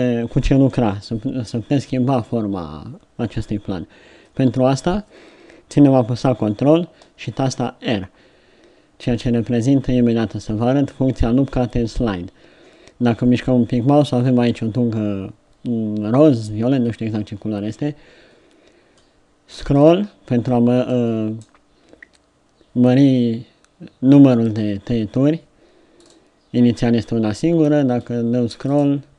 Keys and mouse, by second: 7.4 ctrl+r.